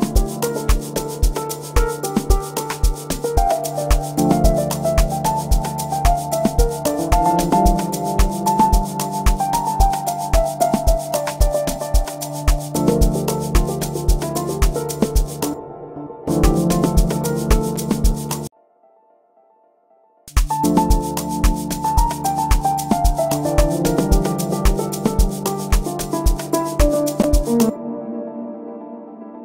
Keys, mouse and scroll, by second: 2.0 click, 14.7 space, 26.0 click, 26.0 space.